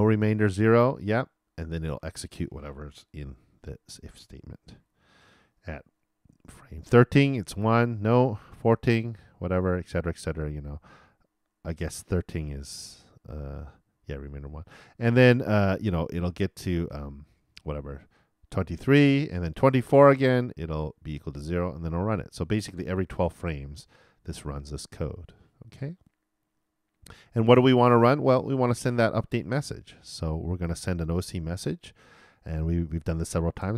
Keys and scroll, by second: 3.6 shift+Return, 4.6 shift+], 33.6 shift+o.